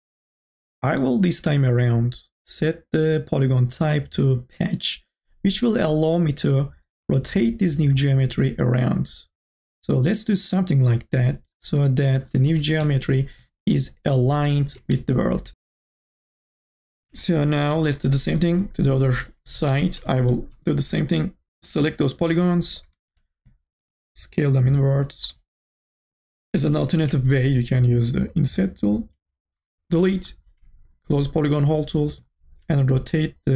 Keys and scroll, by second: 12.3-13.4 typing, 14.6 ctrl+s, 19.2-20.2 typing, 22.9 t, 27.3 ctrl+z, 29.9 Delete.